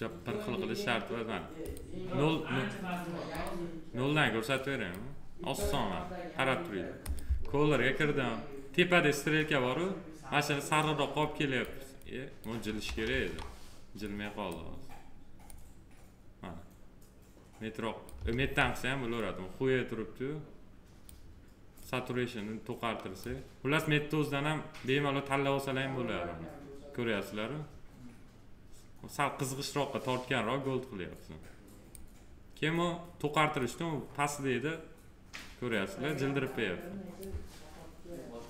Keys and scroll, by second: 13.0 ctrl+z, 18.8 ctrl+z.